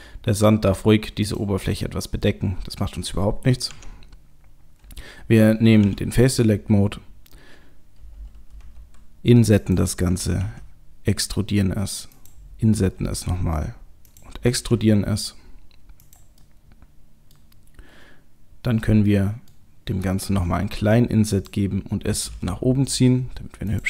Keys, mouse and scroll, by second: 1.7 middle click, 2.2 middle click, 3.6 Tab, 5.8 3, 6.2 click, 8.6 i, 10.4 e, 12.8 i, 14.7 e, 16.4 middle click, 18.1-19.1 scroll up 1, 19.1 middle click, 20.3 i, 22.2 g.